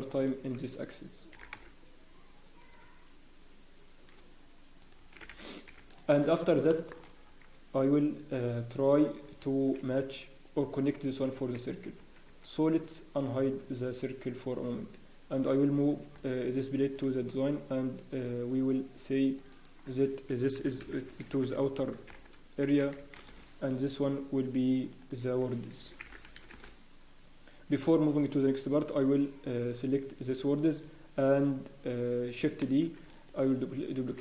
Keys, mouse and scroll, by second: 0.1 alt+click, 1.3 e, 6.2-6.5 scroll up 1, 6.7 shift+middle click, 7.7 scroll down 1, 8.3 scroll up 4, 8.8 scroll down 3, 9.1 scroll up 1, 10.7 scroll down 1, 12.3 Tab.